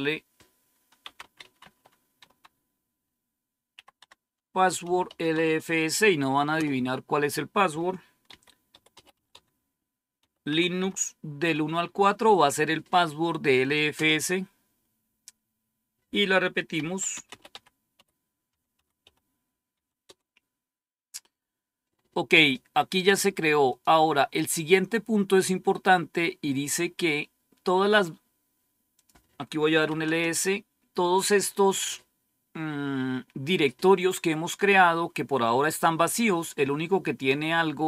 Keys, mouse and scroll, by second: 0.9-2.1 typing, 3.6-5.7 typing, 3.9 Tab, 6.5 Return, 8.2-12.8 typing, 13.9 typing, 16.1-19.7 typing, 20.0 Return, 23.6 click, 24.5-25.2 scroll down 1, 28.9 click, 29.4-30.3 typing.